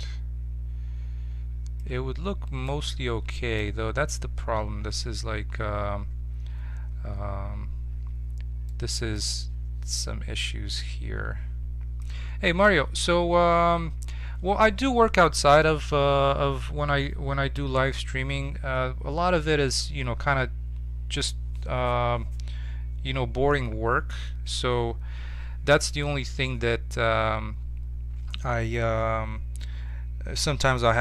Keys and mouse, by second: 2.0-5.6 middle drag, 8.6-15.7 middle drag.